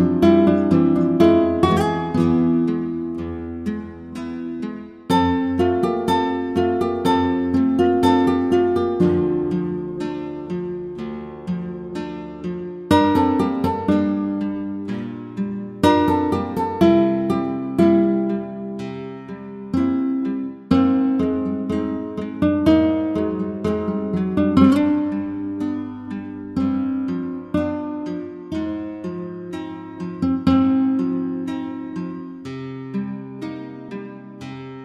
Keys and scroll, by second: 20.7 Return, 33.6 Return.